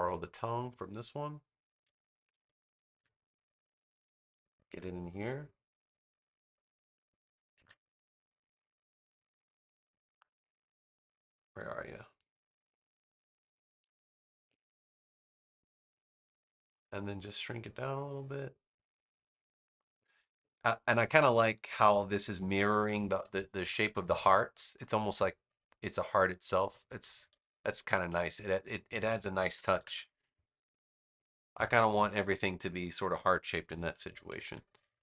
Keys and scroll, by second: 2.2 super+c, 2.9 super+v, 7.5 v, 23.3 space, 29.4 super+-, 34.2 super+-.